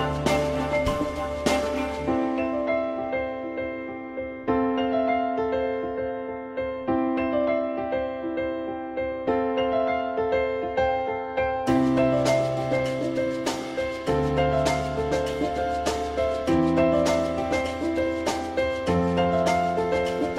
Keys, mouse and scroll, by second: 0.1 ctrl+z, 2.2 ctrl+z, 7.7 click, 10.5 click, 13.9 alt+x, 15.0 alt+x, 17.6 alt+x, 18.2 alt+x.